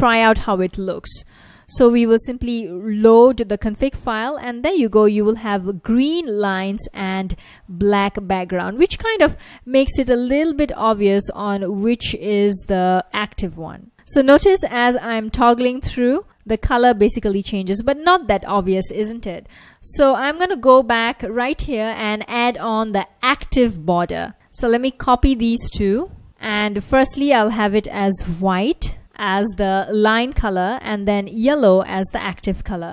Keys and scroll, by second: 2.4 ctrl+a, 3.0 r, 5.9 F1, 13.9 ctrl+a, 13.9 o, 14.4 ctrl+a, 14.7 o, 15.5 ctrl+a, 15.9 o, 16.2 ctrl+a, 17.3 ctrl+a, 18.0 o, 19.7 super+Tab, 25.8 super+c, 28.3-29.5 typing, 30.7-32.6 typing.